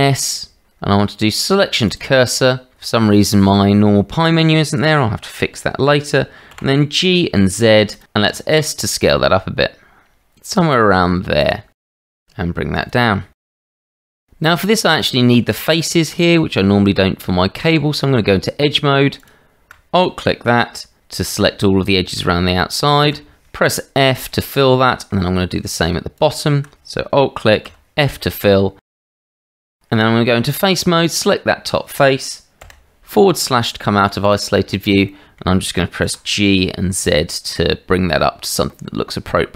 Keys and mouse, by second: 6.5 g, 8.3 s, 12.0 g, 13.3 drag, 14.4 KP_Divide, 15.4 Tab, 19.2 alt+click, 23.1 f, 24.2 middle click, 27.7 f, 28.2 middle click, 29.5 middle click, 29.9 Tab, 31.0 click, 34.3 click, 35.0 shift+middle click, 36.0 g.